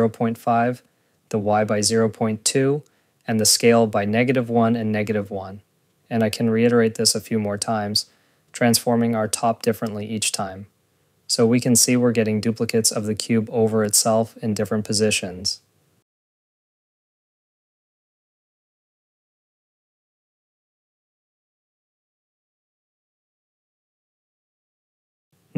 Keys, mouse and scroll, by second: 0.2 click, 7.7 click, 9.4-10.1 typing, 9.8 click, 10.5 click, 11.2 click, 11.5 click, 11.8-13.8 typing, 11.9 click, 12.2 click, 13.1 click, 13.5 Return, 13.6 click, 13.9 Return, 13.9 ctrl+s, 14.0 scroll, 14.1 click, 14.8 click, 14.9 click, 15.0 Tab, 15.1 r, 15.4 click, 15.8 click, 16.3 click, 16.4 click, 16.7 ctrl+s, 16.9 click, 17.5 click, 17.8 ., 18.1 Return, 18.1 click, 18.2 ., 18.4 ctrl+s, 18.7 click, 19.0 click, 19.2 click, 19.4 ctrl+s, 19.6-20.5 typing, 20.5 click, 20.7 click, 21.1 click, 22.0-22.9 typing, 22.1 click, 22.3 click, 22.7 click, 22.9 click, 23.2 click, 23.3 ctrl+s, 23.6 scroll, 24.3 scroll, 25.3 click.